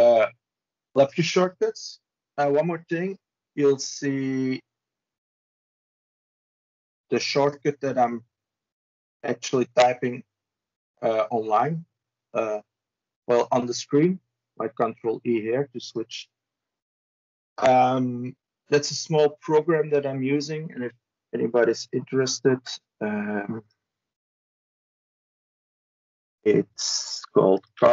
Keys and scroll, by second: 0.9 ctrl+e, 12.4 ctrl+e, 26.0 ctrl+c, 27.5 ctrl+v.